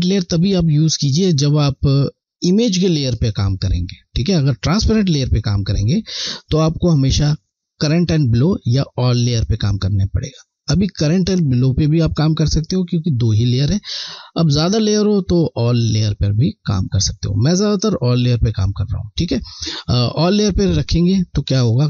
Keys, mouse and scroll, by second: 0.3 click, 4.6 click, 16.1 click, 21.6 click.